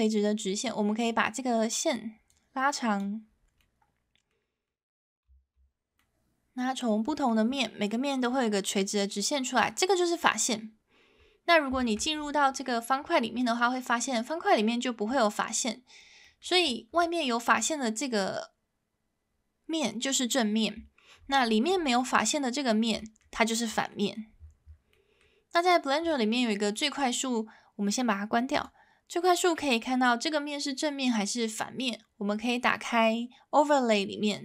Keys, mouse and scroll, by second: 1.1-3.1 drag, 3.6 middle click, 4.7 middle click, 5.3 z, 6.0-7.3 middle drag, 7.6-9.3 middle drag, 11.8 shift+middle click, 13.4 middle click, 14.3-15.5 middle drag, 16.2 middle click, 17.6 click, 22.0 middle click, 23.0 middle click, 23.7 middle click, 24.9 middle click, 26.7-34.4 drag.